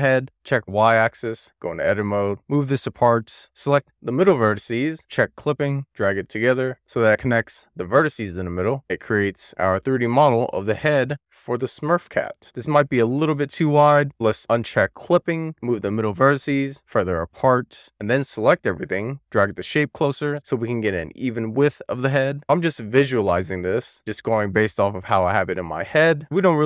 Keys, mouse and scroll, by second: 0.5 click, 1.1 middle click, 1.6-2.0 scroll up 1, 2.0 scroll down 1, 2.0 a, 2.3 click, 3.6 alt+z, 4.2 click, 5.8 click, 8.8 alt+z, 9.5 middle click, 10.6-10.9 scroll down 2, 10.9-12.4 middle drag, 12.4-13.3 scroll up 3, 15.4 click, 16.4 click, 17.9 a, 18.8 click, 22.9 alt+z, 23.2 click, 24.9 click, 26.3 alt+z.